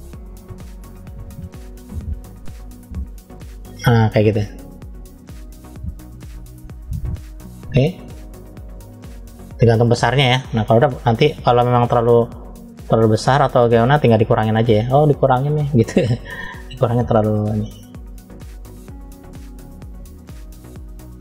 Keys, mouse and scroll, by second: 0.0 click, 0.2 click, 1.0 click, 1.4 click, 1.6 click, 2.5 click, 3.0 click, 3.2 click, 3.7 click, 4.1 click, 4.5 click, 5.0 click, 5.3 click, 6.2 click, 7.2 click, 8.3 click, 9.3 click, 11.3 scroll down 1, 11.8-13.8 middle drag, 13.9 middle click, 15.6 click, 16.1 scroll up 1, 16.6 middle click, 17.4-18.3 scroll up 1, 18.3 click, 18.6 click, 19.2 click, 19.8 click, 20.4 click, 21.0 click.